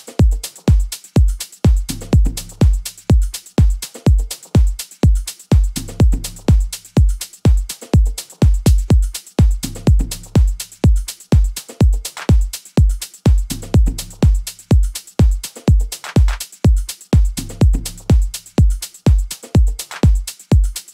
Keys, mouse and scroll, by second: 13.9 F1, 14.2 F5, 17.1 right click.